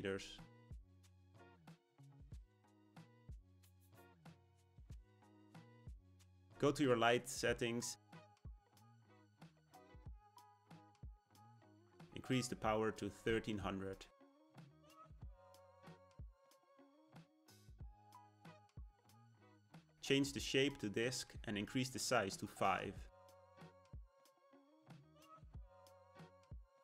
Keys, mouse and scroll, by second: 5.2-8.2 scroll down 1, 12.0-14.0 drag, 14.0 KP_0, 19.6-25.1 drag.